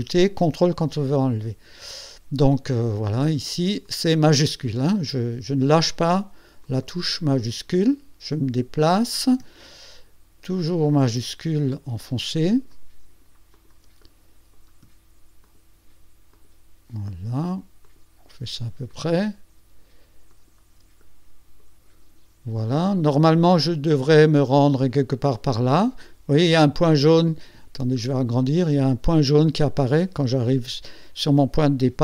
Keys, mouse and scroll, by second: 2.8 shift+click, 3.8 shift+click, 4.7 shift+click, 5.7 shift+click, 6.6 shift+click, 7.8 shift+click, 8.5 middle click, 10.5 shift+click, 11.6 shift+click, 12.5 shift+click, 13.5 shift+click, 14.0 shift+click, 15.4 shift+click, 16.3 shift+click, 17.0 shift+click, 17.8 shift+click, 18.9 shift+click, 20.3 shift+click, 21.0 shift+click, 27.3 scroll up 2, 28.0 ctrl+scroll up 2, 28.6 ctrl+click.